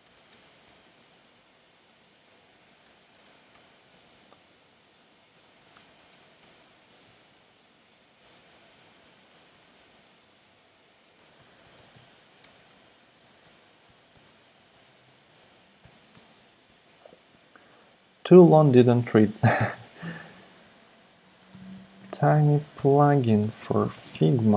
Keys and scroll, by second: 0.0-0.9 typing, 2.4 Left, 2.8-3.9 typing, 5.3 Left, 5.7-6.9 typing, 8.3 BackSpace, 8.5 BackSpace, 8.6 BackSpace, 9.0 BackSpace, 9.6 Return, 9.7 Return, 11.1-15.8 typing, 15.1 Left, 15.2 Left, 15.4 Left, 15.5 Left, 20.0 Up, 20.1 Up, 20.3 Up, 20.8-24.5 typing.